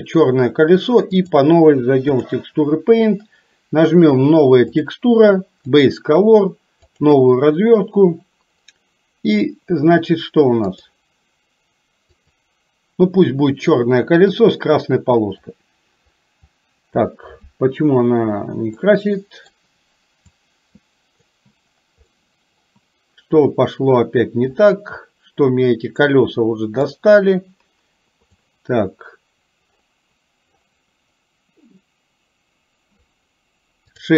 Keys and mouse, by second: 0.0 click, 1.3 click, 5.0-7.2 drag, 10.8 click, 15.6 click, 16.6 click, 19.0 middle click, 20.4 click, 22.2 middle click, 27.0-28.4 drag.